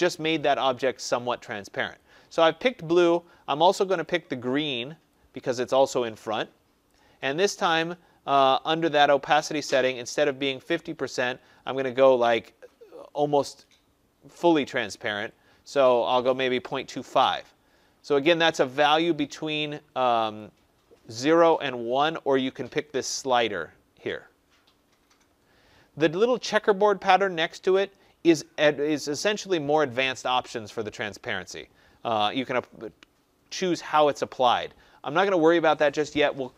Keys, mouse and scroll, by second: 2.9 click, 4.0 click, 6.8 click, 9.3 click, 15.7 click, 16.1-17.3 typing, 18.8 click, 20.3 click, 30.7 click, 35.3 click.